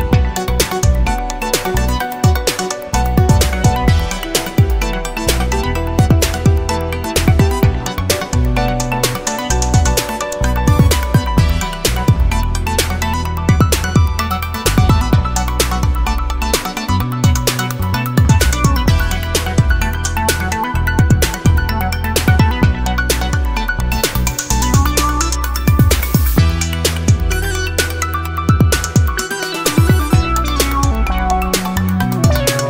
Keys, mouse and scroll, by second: 1.2 click, 2.6 BackSpace, 3.0 0, 5.2 scroll up 1, 6.1-9.8 drag, 10.1-10.8 scroll down 2, 11.8 click, 15.3 click, 18.8 click, 20.0 BackSpace, 20.5 0, 22.1 click, 23.6 Left, 24.3 BackSpace, 24.6 1, 26.1-29.3 drag, 29.8 click, 30.9 click, 32.1-32.6 drag.